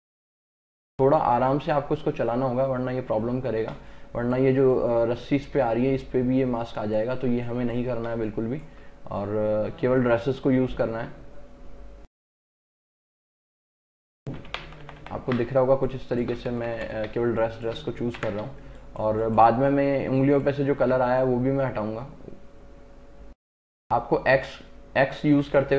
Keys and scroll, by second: 3.9 space, 7.4 space, 14.6 ctrl+KP_Subtract, 15.5 space, 16.6 ctrl+KP_Add, 17.2 space, 18.2 ctrl+KP_Add, 18.6 space, 24.4 x.